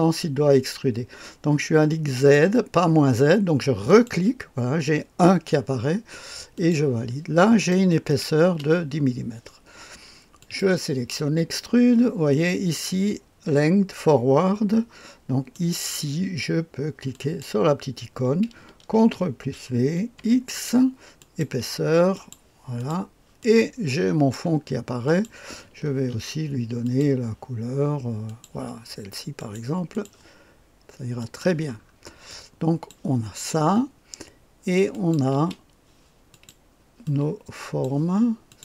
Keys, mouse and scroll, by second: 2.1 click, 3.9 click, 6.5 click, 7.4 click, 8.1 click, 8.5 space, 10.4 click, 12.0-14.4 scroll down 1, 15.5 click, 17.1 click, 19.0 ctrl+v, 20.2 x, 21.2 click, 22.1 click, 22.8 click, 23.4 click, 25.0 click, 25.9 ctrl+d, 26.8 click, 28.2 click, 29.4 click, 29.9 click, 31.2 click, 32.0 scroll down 1, 32.3-35.1 drag, 35.3 space, 36.3 click, 37.0 click, 38.5 click.